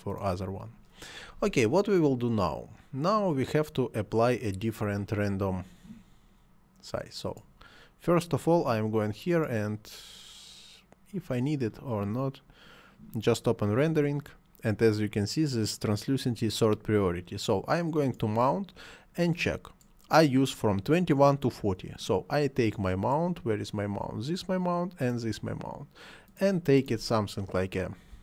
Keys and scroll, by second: 28.1 2.